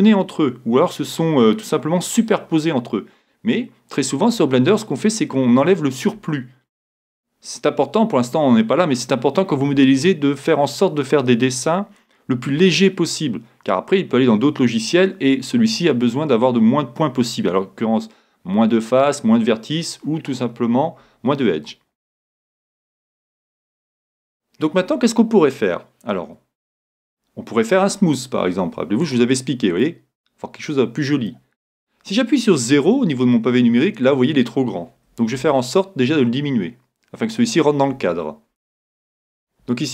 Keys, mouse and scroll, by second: 22.0-26.8 middle drag, 26.8 Tab, 29.0-30.8 drag, 30.6 middle click, 35.4 s, 37.5-39.4 drag.